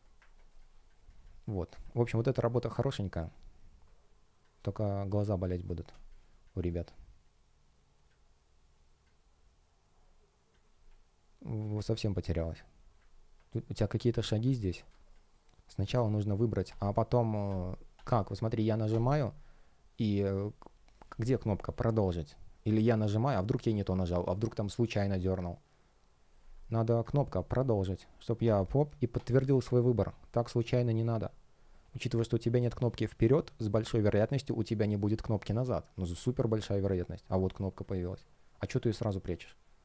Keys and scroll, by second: 0.4 space, 13.4 space, 14.2 super+\, 14.5 shift+0, 14.8 space, 35.9 space.